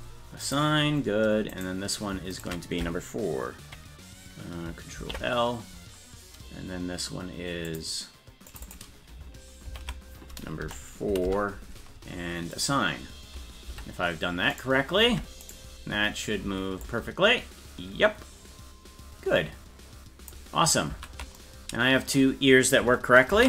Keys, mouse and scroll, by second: 0.4 click, 1.5 right click, 2.3 shift+right click, 5.0 ctrl+l, 7.6 click, 8.5 click, 8.6-11.7 drag, 12.5 click, 13.7 Tab, 14.5 right click, 15.1 ctrl+Tab, 15.5 right click, 16.8-20.3 drag, 21.0 ctrl+z.